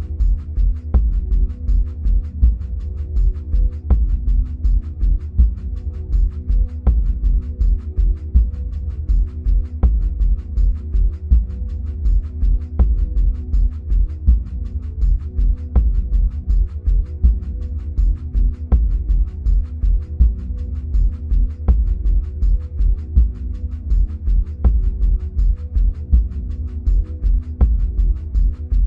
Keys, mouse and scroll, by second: 1.3 click, 6.0-11.3 middle drag, 11.3 click, 15.0-16.8 middle drag, 16.8-27.2 drag, 27.2-28.8 middle drag, 27.9-28.8 scroll down 2.